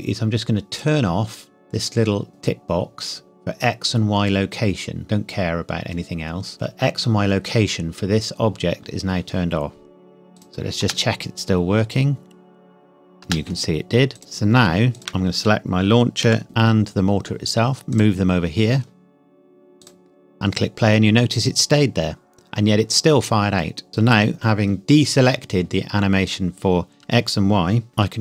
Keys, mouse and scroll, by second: 0.7 click, 10.8 space, 11.9-12.6 scroll down 1, 13.2 space, 14.1 click, 16.2 g, 16.4 x, 17.9 click, 21.6 scroll down 1, 27.9 g.